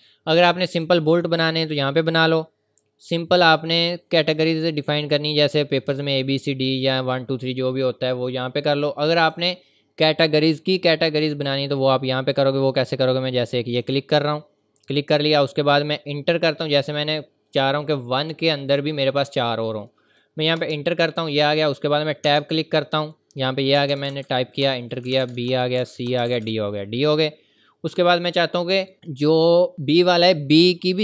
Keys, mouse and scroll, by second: 0.7 click, 9.2 click, 13.7 click, 20.1 click, 20.6 Return, 22.2 Tab, 23.7-26.7 typing, 24.6 Return, 25.5 Return, 28.2-29.0 typing, 29.7 click.